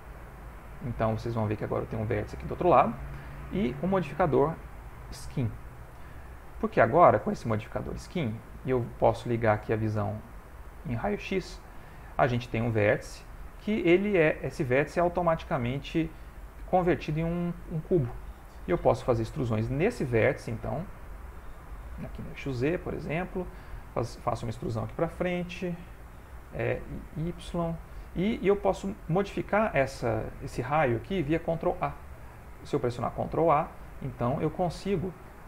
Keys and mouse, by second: 0.2 Tab, 0.2 middle click, 3.6 Tab, 3.6 click, 7.0 ctrl+middle click, 9.4 click, 10.1 click, 10.5 click, 18.8 e, 23.4 click, 23.8 middle click, 25.6 e, 32.0 ctrl+a, 34.5 click.